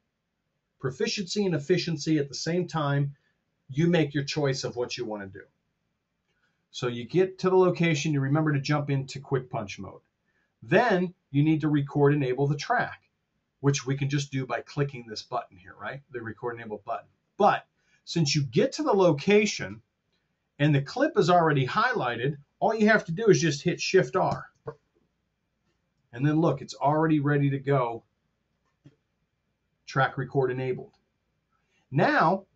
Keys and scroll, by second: 24.2 shift+r.